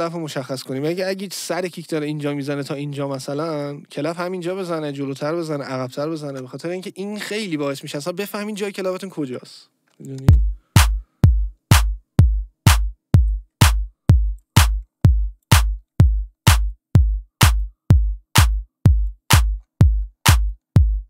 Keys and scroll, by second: 6.3 ctrl+z, 10.2 space.